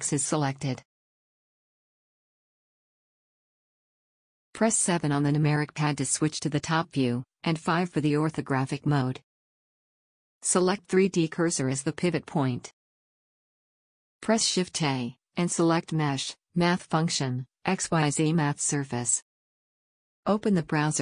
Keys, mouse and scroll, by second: 4.8 KP_7, 7.5 KP_5, 11.6-12.0 drag, 12.5 click, 14.4 shift+a.